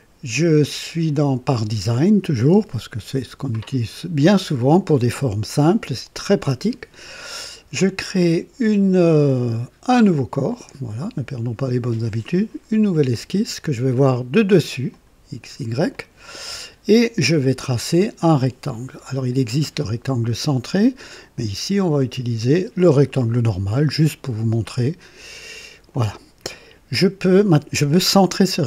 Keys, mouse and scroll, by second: 10.5 click, 13.1 click, 14.9 click, 15.9 click, 19.4 click, 22.0 click, 22.9 click, 24.6 click, 25.9 click, 26.5 right click.